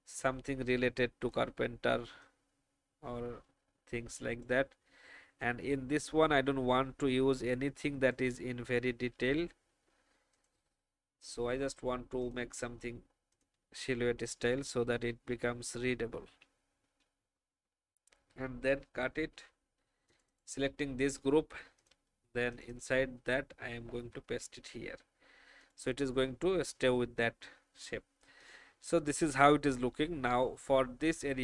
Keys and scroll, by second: 16.4 alt+shift+Down, 17.2 alt+shift+Up, 18.9 ctrl+x.